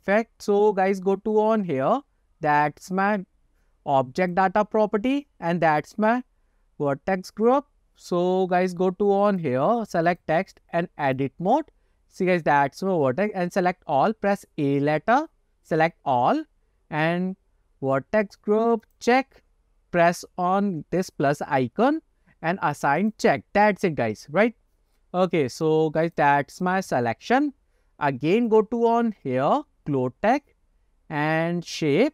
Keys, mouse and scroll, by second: 4.3 click, 9.4 click, 10.2-11.4 drag, 12.4-13.2 scroll up 1, 13.2 scroll up 1, 14.4 a, 18.9 click, 23.1 click, 25.6 click, 26.2-27.2 drag, 28.6 click, 30.0-31.2 scroll down 9.